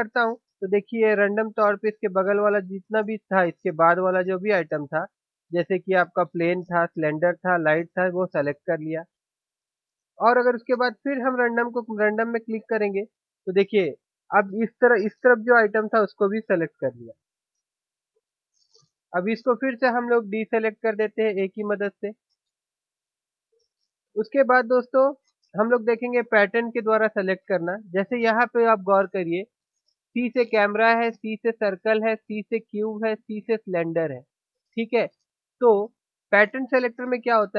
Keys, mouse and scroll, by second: 19.3 click, 21.1 a, 26.9-28.6 drag, 30.4-35.7 right drag.